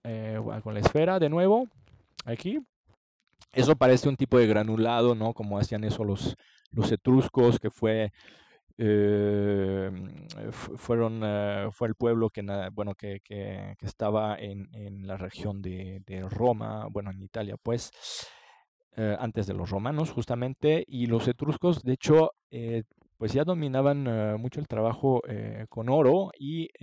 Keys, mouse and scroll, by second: 10.3 ctrl+s, 12.0-13.9 middle drag, 13.9 click, 21.3-23.3 middle drag, 26.7-26.8 middle drag.